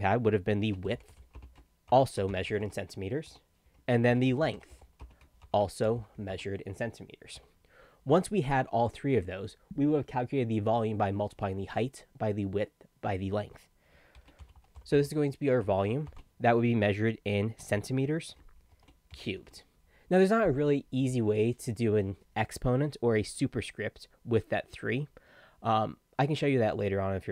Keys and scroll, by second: 0.4-6.8 typing, 3.3 Tab, 7.4 Tab, 13.9-16.1 typing, 17.4-19.9 typing.